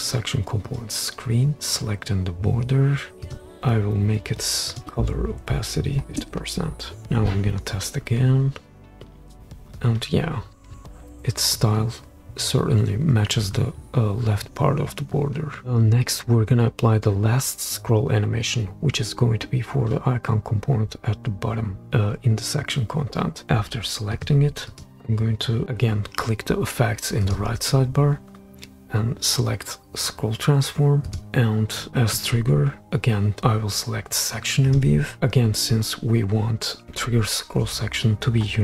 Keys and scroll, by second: 5.4 Left, 6.0 shift+5, 6.1 shift+Return, 7.0 super+p.